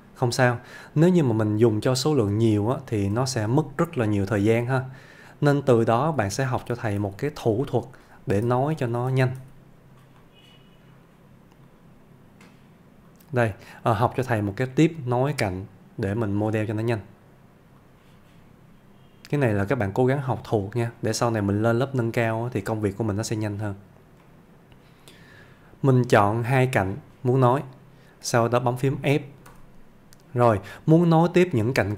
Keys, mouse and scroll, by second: 1.9 click, 2.8 shift+click, 4.6-5.6 middle click, 5.7 scroll down 1, 6.0 ctrl+z, 7.7-8.3 middle click, 8.2-9.4 typing, 10.2 middle click, 11.7 click, 19.7 click, 20.5 middle click, 23.5 scroll up 1, 24.3-25.5 middle click, 29.6 f, 30.5-31.5 middle click.